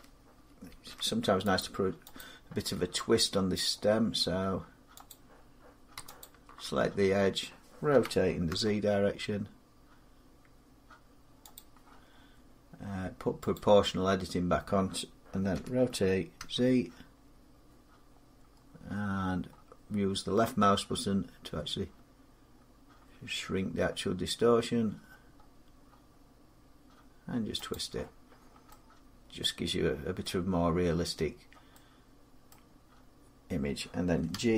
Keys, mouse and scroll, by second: 0.5 ctrl+r, 1.4 click, 2.0 click, 2.8 scroll up 2, 5.0 click, 6.0 alt+click, 7.7-8.3 typing, 11.3 click, 13.3 click, 15.3-16.2 typing, 18.2 middle click, 18.4-21.0 scroll, 21.3 scroll up 10, 22.4-23.6 scroll up 3, 23.6-25.1 scroll down 3, 25.1-25.9 scroll down 4, 27.5 click, 27.6 scroll, 28.2 scroll, 30.0 scroll, 30.8 scroll, 32.3-33.5 scroll, 34.1 g.